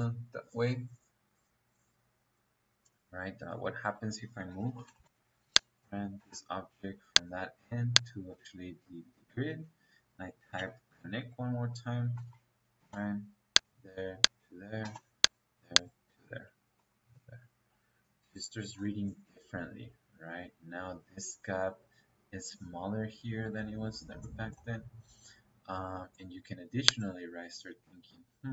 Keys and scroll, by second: 3.8 Escape, 4.4 m, 4.7 o, 4.9 e, 5.0 space, 6.1 space, 8.2 Escape, 9.4 Escape, 10.8 o, 12.1 n, 12.7 space, 14.7 space, 16.1 Escape, 27.4 Escape.